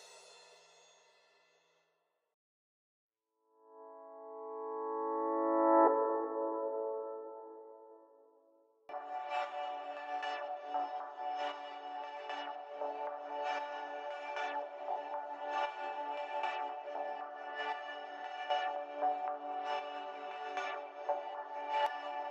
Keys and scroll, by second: 2.3 typing.